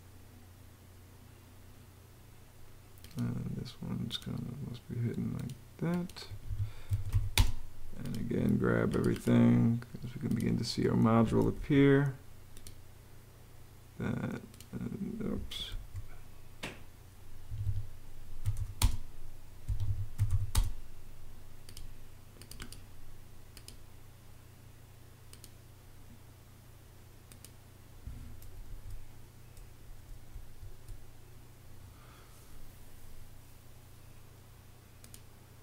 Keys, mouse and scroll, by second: 6.0 Escape, 6.4-8.0 typing, 11.3 super+z, 15.5 super+z, 17.2 Escape, 17.9-20.5 typing, 19.4 Escape, 28.4 super+z, 30.1 super+z.